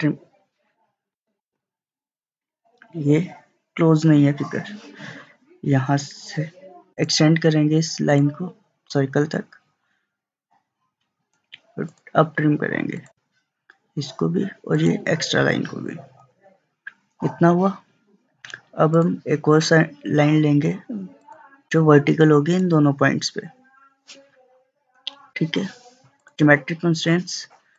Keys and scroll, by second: 1.5 ctrl+z, 24.9 Escape.